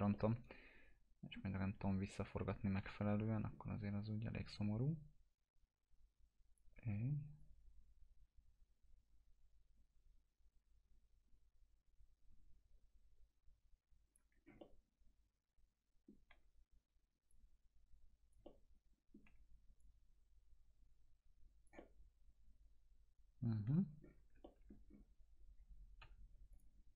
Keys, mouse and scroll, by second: 0.2-1.7 alt+middle drag, 2.8 t, 3.5 scroll down 1, 4.8-6.7 drag, 6.8 w, 7.4-14.3 drag, 14.4 scroll down 1, 14.6-16.2 alt+middle drag, 17.6-19.4 click, 18.5-19.8 alt+middle drag, 20.1-21.7 drag, 21.8-23.7 alt+middle drag, 24.0-24.4 scroll down 2, 24.5 alt+middle click, 24.9-26.1 scroll down 2, 26.1 p, 26.6 click.